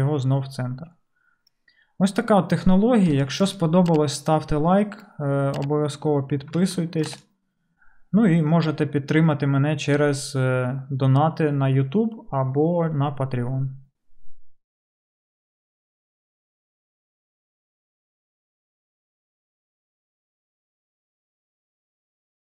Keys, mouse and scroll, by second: 0.2-22.5 middle drag.